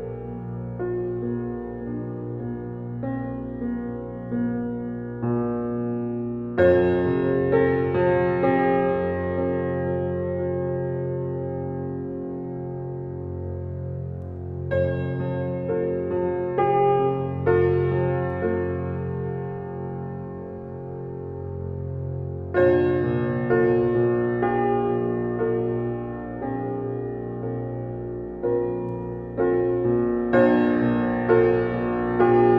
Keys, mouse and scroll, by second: 2.3 click, 13.1 click, 16.1 z, 18.6 x, 19.5 alt+BackSpace, 21.8 ctrl+alt+z, 26.9 ctrl+shift+i, 29.2 click, 30.3 alt+BackSpace.